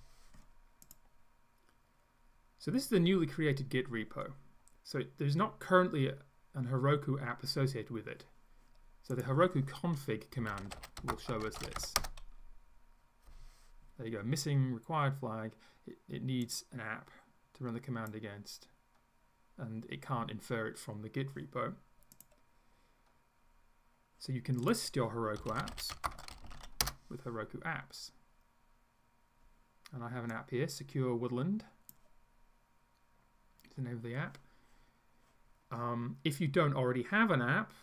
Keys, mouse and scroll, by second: 9.2 click, 10.2-12.3 typing, 16.4-18.3 drag, 24.7 click, 25.2-27.1 typing, 30.3-32.1 drag.